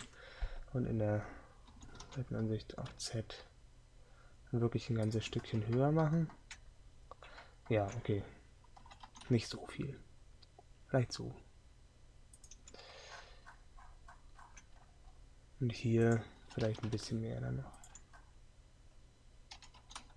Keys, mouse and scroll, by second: 0.0 KP_3.